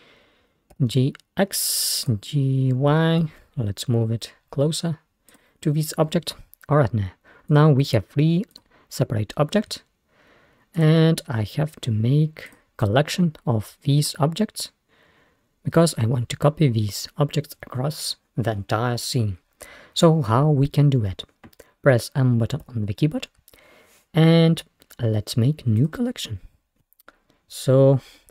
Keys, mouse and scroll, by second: 0.8 g, 3.2 g, 7.5 click, 8.6 click, 10.8 shift+click, 12.5 shift+click, 22.7 m.